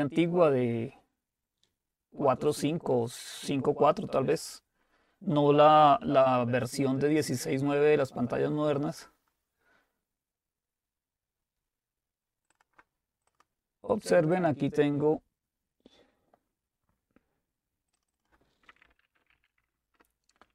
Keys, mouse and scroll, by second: 12.5-15.9 drag, 17.9-19.3 drag, 18.6-19.8 typing, 19.9 Return.